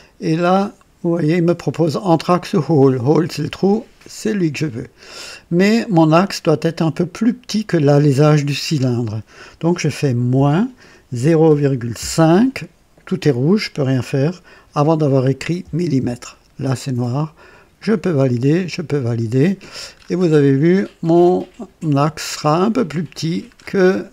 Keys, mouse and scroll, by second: 4.1 click, 10.2 KP_Subtract, 11.1 KP_0, 11.4 ,, 11.9 KP_5, 15.5 m, 15.9 m, 17.7 click, 18.5 click, 19.8-20.2 scroll up 1, 23.4-24.1 scroll down 4.